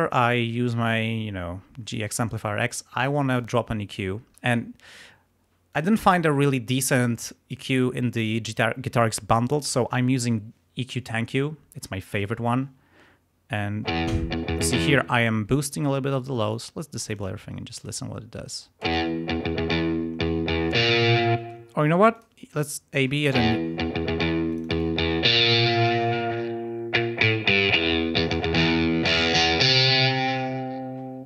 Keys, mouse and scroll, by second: 3.3 click, 5.6 click, 7.2-8.4 drag, 13.8 space, 14.9 space, 16.5 click, 17.1 click, 17.7 click, 18.8 space, 21.4 space, 22.1 click, 23.3 space, 24.5-27.7 drag.